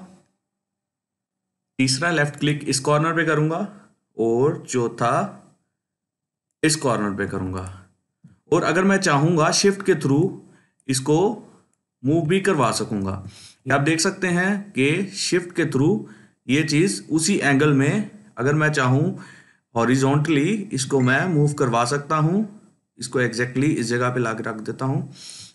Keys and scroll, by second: 13.2 ctrl+z.